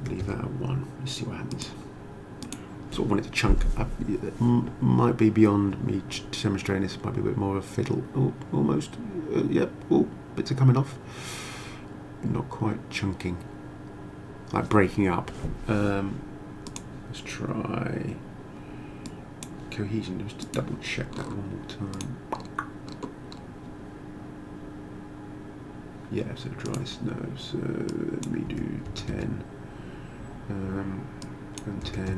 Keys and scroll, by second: 0.0 1, 0.2 Return, 28.5 1, 28.9 0, 29.1 Return, 31.6-32.1 typing.